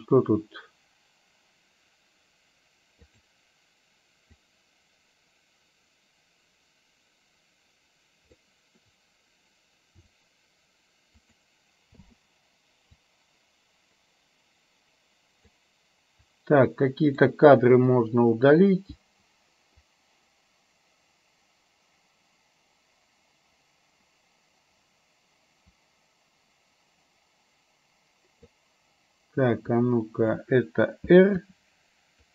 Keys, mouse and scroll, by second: 3.2 click, 4.5-8.5 drag, 10.1 r, 12.0 i, 13.2-15.7 drag, 16.3-17.3 drag, 17.9 Delete, 19.9-28.7 drag, 31.4 r.